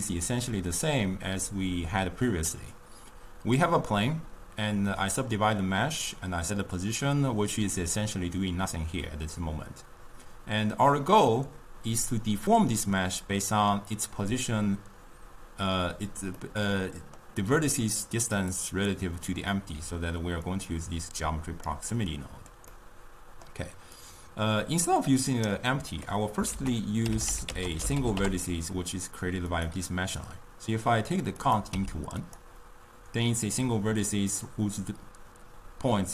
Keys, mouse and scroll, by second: 16.4-17.7 middle drag, 17.7 d, 18.0 d, 18.1 click, 18.5 d, 18.6-19.1 drag, 19.1-20.0 d, 20.5 click, 23.1 middle click, 24.1-24.5 drag, 26.7 ctrl+a, 31.5-32.6 drag.